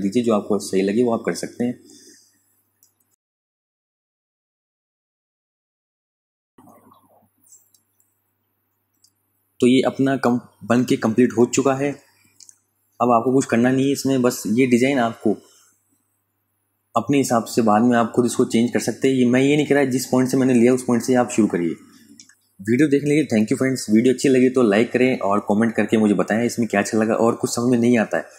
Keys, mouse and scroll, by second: 1.0 click, 9.2 space, 9.4 click, 9.8 ctrl+click, 11.2 f, 11.7 space, 12.0 click, 12.3 space, 12.9 ctrl+click, 14.7 ctrl+click, 21.5 click, 25.5 click.